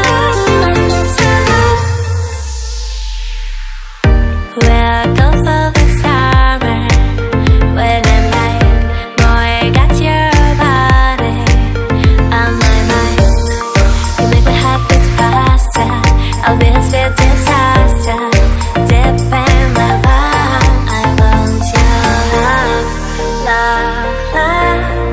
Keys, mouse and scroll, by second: 0.0 BackSpace, 0.7 click, 1.2 click, 2.1 click, 4.3 click, 4.7 click, 6.6 click, 10.7 click, 11.4 shift+click, 12.0 click, 12.8 click, 13.8 click, 14.6 click, 15.8 click, 16.6 shift+click, 17.4 click, 18.5 click, 19.4 click, 20.0 click, 20.4 click, 20.6 double click, 22.3 click, 23.0 click, 23.3 click.